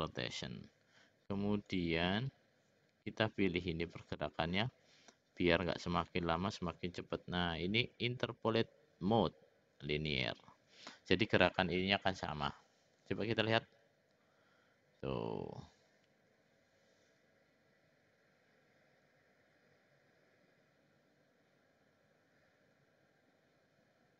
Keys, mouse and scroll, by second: 1.7-4.1 drag, 5.6-10.6 right drag, 13.5 click.